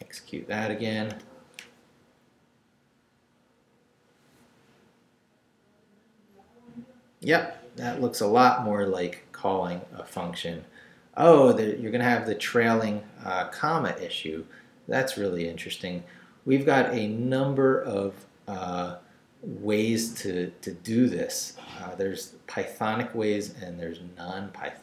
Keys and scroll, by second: 0.1 shift+Up, 1.1 Return.